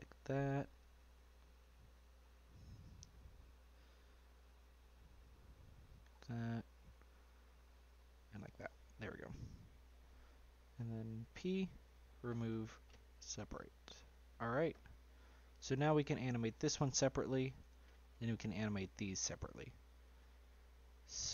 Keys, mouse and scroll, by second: 0.9 l, 1.4 middle click, 2.2-2.9 scroll up 3, 2.9-5.0 middle drag, 5.0 l, 5.5 middle click, 6.1 scroll up 3, 6.3-8.1 middle drag, 8.1 l, 8.6 scroll down 2, 8.9 middle click, 9.3-9.7 scroll down 4, 9.7 middle click, 10.3 scroll down 1, 10.4 middle click, 11.3 p, 14.4 Tab, 14.6-15.2 scroll down 3, 15.2 middle click, 15.8 click, 16.8 g, 18.1 click, 18.5 g, 19.9 scroll down 2, 20.1-20.6 middle drag, 20.6 scroll down 2, 20.8-21.3 middle drag.